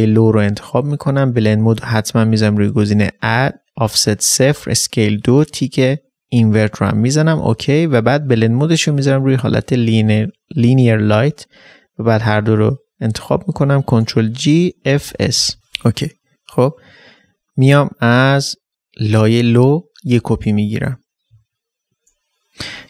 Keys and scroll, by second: 13.6 ctrl+shift+g, 14.7 ctrl+shift+g, 16.2 typing, 20.1 ctrl+j, 21.2 ctrl+j, 21.3 ctrl+space.